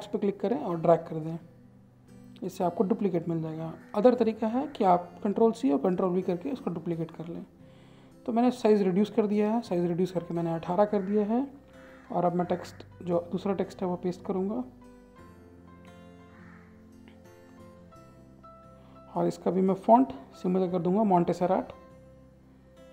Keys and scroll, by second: 3.1 ctrl+a, 11.3 ctrl+c, 11.8 alt+Tab, 13.0 ctrl+v, 14.8 ctrl+a.